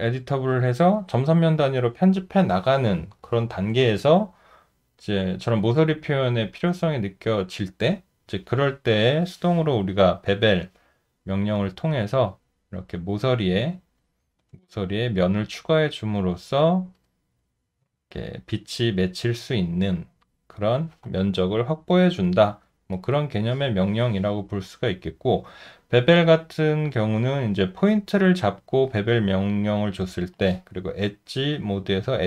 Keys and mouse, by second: 11.1 alt+middle click, 14.9 alt+click, 16.4 alt+middle click, 17.0 alt+right click, 25.0 alt+middle click, 25.7 alt+click, 26.5 alt+right click, 27.0 alt+middle click.